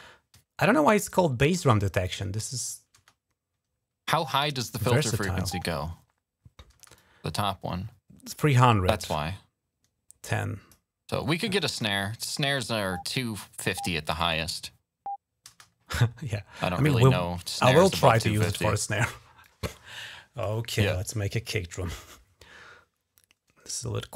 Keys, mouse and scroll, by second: 2.2 click, 2.7 space, 4.5 space, 4.8 click, 5.3 space, 6.5 space, 6.7-10.5 drag, 10.1 typing, 10.9 click, 11.4 typing, 12.7 click, 15.2 space, 16.5 click, 17.9 click, 18.0 click, 19.2-20.2 drag, 24.0 click.